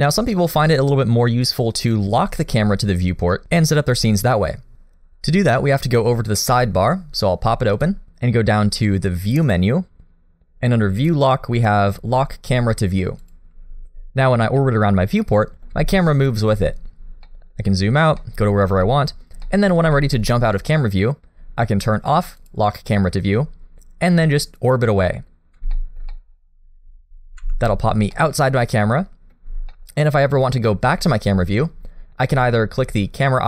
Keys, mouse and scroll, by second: 1.7 scroll up 1, 7.7 click, 27.5 shift+middle click, 27.5 scroll down 2, 27.5 n, 28.1 middle click, 29.7 middle click.